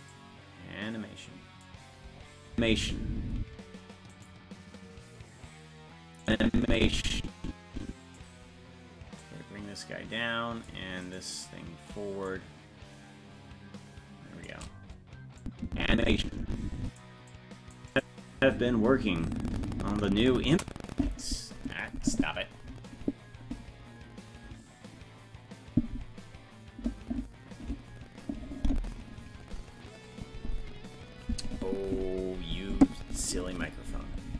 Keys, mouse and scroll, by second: 0.1-1.5 drag, 2.5 space, 4.2 right click, 6.2-8.2 drag, 9.2-10.7 drag, 11.1-12.3 right drag, 12.3-14.5 shift+drag, 15.4-17.0 drag, 17.3 click, 17.9 click, 18.4 space.